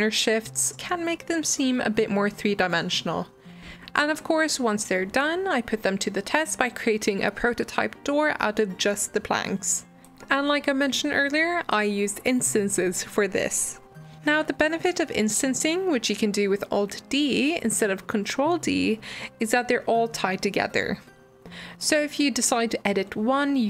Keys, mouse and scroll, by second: 0.3 ctrl+b, 2.3 g, 3.5 click, 3.7 middle click, 4.0 click, 4.2 middle click, 4.6 g, 5.6 alt+d, 5.8 click, 6.1-8.3 typing, 8.6 scroll up 4, 8.8 shift+middle click, 8.9-9.5 scroll down 1, 9.5 alt+d, 11.0 click, 11.2 shift+click, 11.3 g, 11.7 click, 12.2 click, 12.3 alt+d, 12.8-15.1 typing, 14.8 middle click, 14.9 scroll down 2, 16.0 middle click, 16.2 scroll down 2, 16.3 middle click, 16.3 g, 16.7 middle click, 17.8 alt+d, 19.7 middle click, 19.9 ctrl+m, 20.5-21.0 middle drag, 21.0 scroll up 1, 21.1 middle click, 21.4 drag, 21.6 shift+click, 21.7 shift+click.